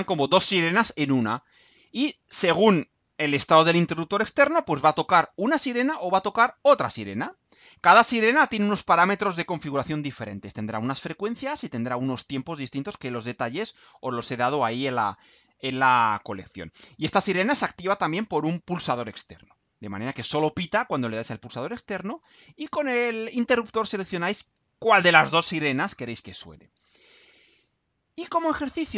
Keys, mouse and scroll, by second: 28.1-28.9 scroll down 4.